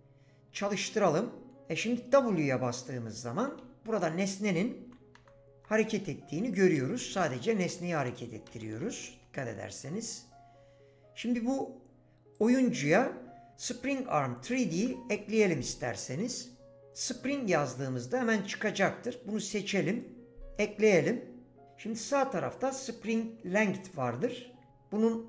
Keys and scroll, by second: 2.2 w, 3.5-9.5 typing, 14.7 ctrl+a.